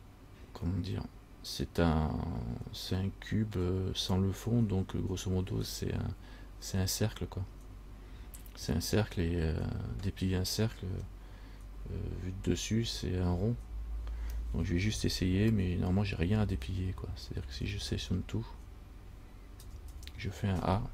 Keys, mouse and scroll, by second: 17.9 u, 19.8 a, 20.1 a.